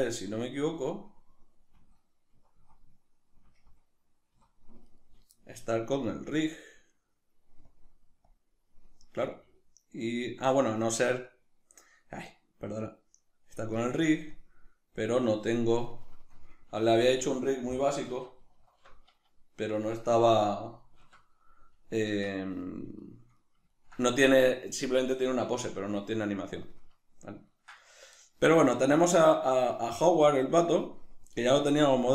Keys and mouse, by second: 0.4 Right, 0.8 Left, 2.4 Right, 3.6 Left, 4.5 Right, 7.7-11.3 drag, 11.3-15.9 middle drag, 13.8 click, 15.9-16.9 right drag, 16.9 a, 23.0-32.1 shift+middle drag.